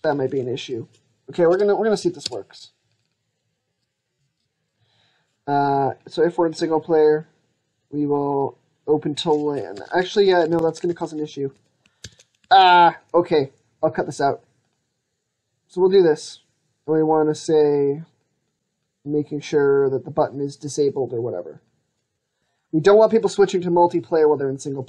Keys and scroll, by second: 9.6 ctrl+z, 10.0 ctrl+z, 10.3 ctrl+z, 10.7 ctrl+z, 11.9 ctrl+z, 12.3 ctrl+z, 22.2 ctrl+s.